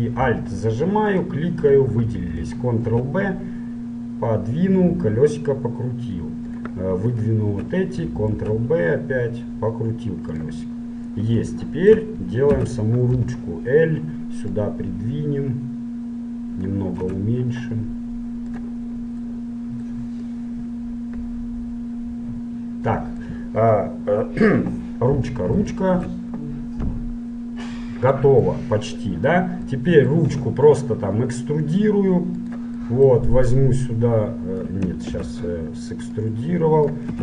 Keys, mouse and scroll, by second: 1.3-3.2 right drag, 3.2 ctrl+b, 7.3-9.2 right drag, 8.6 ctrl+b, 10.9-13.6 middle drag, 12.7 a, 13.3 l, 13.9 middle click, 14.7-16.7 drag, 17.3 s, 19.1-20.3 middle drag, 20.3-22.2 drag, 23.3-25.1 middle drag, 25.1-27.5 middle drag, 28.7-31.8 middle drag, 30.5 e, 32.9-33.9 middle drag, 33.9-35.7 drag, 35.3 ctrl+z, 36.3-37.2 drag.